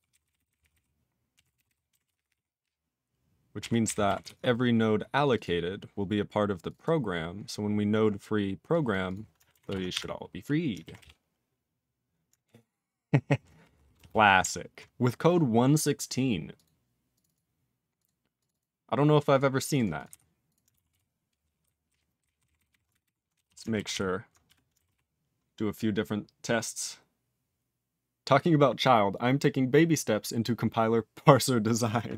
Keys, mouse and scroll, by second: 0.1 ctrl+n, 0.2 ctrl+n, 0.2 ctrl+e, 0.3 ctrl+n, 0.5 ctrl+n, 0.6 ctrl+n, 0.7 ctrl+n, 1.3 ctrl+a, 1.4 ctrl+k, 1.5 ctrl+k, 1.6 ctrl+k, 2.1 ctrl+s, 2.2 ctrl+p, 2.3 ctrl+e, 2.6-3.5 ctrl+p, 3.6 ctrl+e, 3.8 ctrl+n, 4.2 ctrl+s, 4.8 scroll up 2, 5.2 click, 5.2 click, 5.3 double click, 5.4 double click, 6.6 click, 6.6 click, 6.7 double click, 6.8 double click, 7.1 scroll down 3, 8.1-8.6 scroll down 2, 8.6 click, 8.8 click, 9.0 click, 9.1 click, 9.6 ctrl+s, 20.0 q, 20.4 click, 20.5 click, 20.8 ctrl+s, 21.6 ctrl+n, 21.8 ctrl+p, 22.2 ctrl+n, 22.4 ctrl+n, 22.5 ctrl+n, 22.6 ctrl+n, 22.9 alt+b, 23.0 alt+b, 23.3 /, 23.4 /, 23.9 ctrl+s.